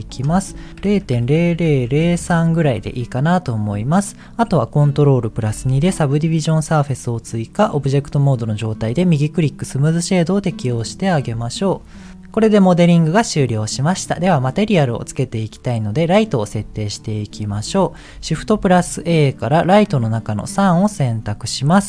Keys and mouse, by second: 0.1-2.3 drag, 1.3 KP_0, 5.6 ctrl+2, 8.6 right click, 11.1 click, 11.7 click, 11.9 middle click, 12.7-14.1 middle drag, 17.6 KP_1.